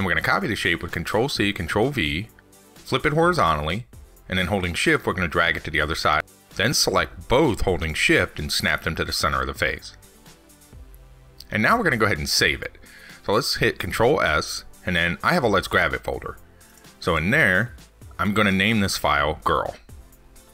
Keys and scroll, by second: 1.9 ctrl+c, 2.1 ctrl+v, 7.3 ctrl+z, 13.0 ctrl+s.